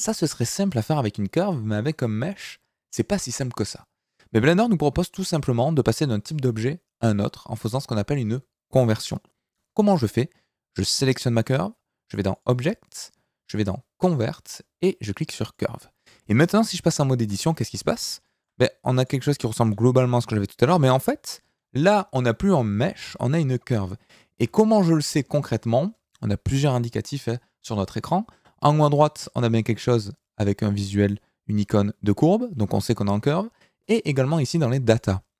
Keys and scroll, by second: 17.3 Tab, 20.1 g, 22.3 Escape, 24.4 Tab.